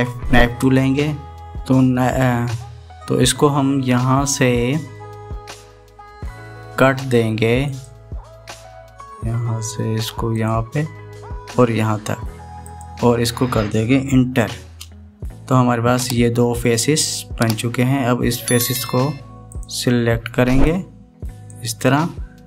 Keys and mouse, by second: 1.5 click, 8.5-15.4 drag, 19.5 click, 20.3 click, 21.5 click.